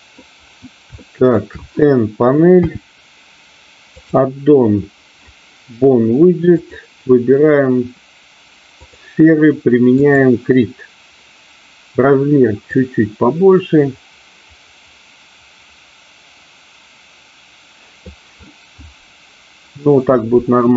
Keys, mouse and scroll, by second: 1.0 shift+middle click, 2.6 n, 4.0 click, 6.7-9.0 drag, 10.1 click, 12.6-20.3 drag.